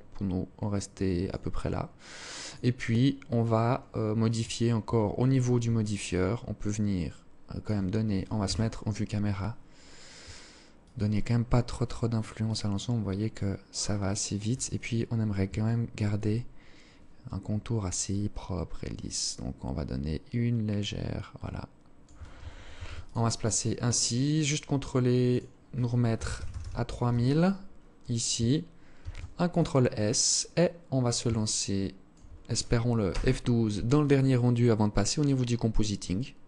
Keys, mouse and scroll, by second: 1.5 click, 5.2 shift+click, 7.5 KP_0, 9.8 shift+click, 13.8-14.4 scroll up 2, 14.7 alt+shift+click, 14.7 scroll up 1, 17.0 shift+click, 21.8 ctrl+s, 23.4 click, 24.4 click, 28.0 ctrl+s, 29.2-29.8 scroll down 3, 30.5 alt+shift+click.